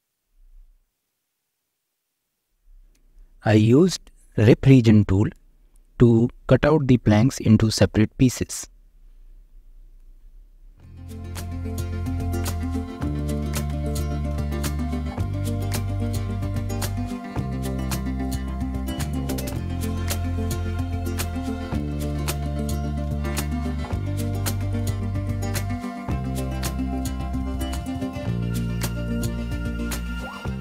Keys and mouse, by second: 0.5 Tab, 1.1 click, 3.8 v, 4.8-5.4 drag, 5.5 f, 5.8 middle click, 6.7 2, 7.7 f, 8.0 Tab, 8.4 alt+z, 8.6 shift+middle click, 8.8 middle click, 9.3 click, 9.6 Tab, 9.8 shift+middle click, 10.7 alt+z, 10.9 click, 11.8 v, 13.3 click, 13.7 f, 14.3 2, 14.7 alt+click, 15.5 f, 15.7 Tab, 15.9 shift+middle drag, 16.2 click, 16.4 Tab, 16.6 shift+middle click, 17.7 click, 18.7 v, 19.8 click, 20.4 f, 21.5 f, 21.7 Tab, 22.0 shift+middle click, 22.4 middle click, 22.6 Tab, 23.7 drag, 24.8 v, 25.7 click, 26.7 f, 27.2 click, 27.7 2, 28.6 f, 28.9 Tab, 29.4 alt+z, 29.5-30.1 drag, 30.3 click.